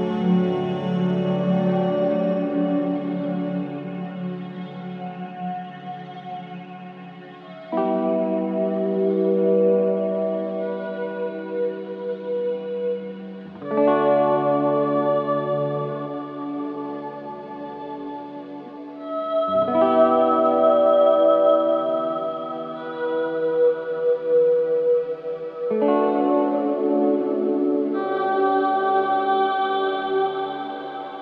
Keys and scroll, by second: 5.6 ctrl+c, 5.8 ctrl+v.